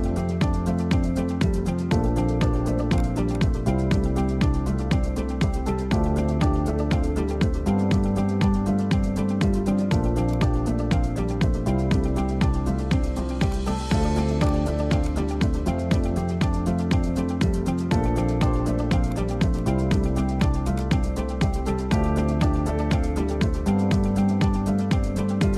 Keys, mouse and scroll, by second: 2.6 shift+a, 3.9 s, 5.9 middle click, 6.2 scroll down 1, 6.4-7.5 middle drag, 7.5 s, 10.2 click, 10.6-11.3 middle drag, 11.3 `, 12.0-13.4 scroll up 5, 13.4 shift+right click, 13.9 shift+a, 15.5 s, 17.6-18.1 middle drag, 18.1-18.4 scroll down 3, 19.0-20.4 drag, 20.6-21.0 drag, 21.8 click, 22.4 middle click, 22.8 scroll down 1, 23.0 middle click, 23.4 scroll up 1, 23.5-24.5 middle drag, 24.5 scroll down 2.